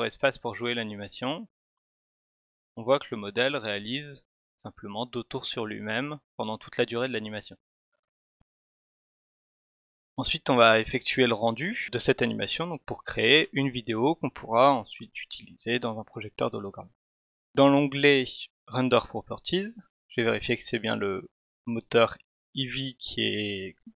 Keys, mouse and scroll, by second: 15.5 click.